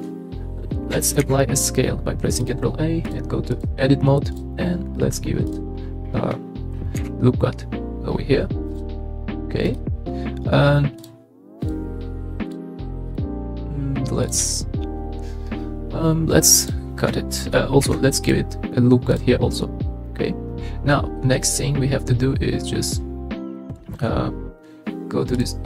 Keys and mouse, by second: 1.2 ctrl+a, 3.1-3.6 drag, 7.0 ctrl+r, 16.6 click, 17.8 ctrl+r, 19.1 click, 25.3 click.